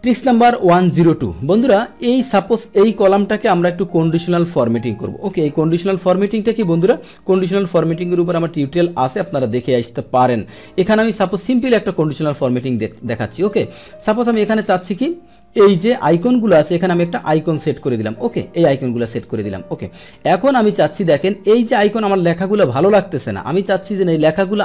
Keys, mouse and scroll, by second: 2.0-3.5 drag, 4.8 click, 5.8 ctrl+shift+Down, 7.6 click, 9.3 click, 18.5 click, 19.3 click.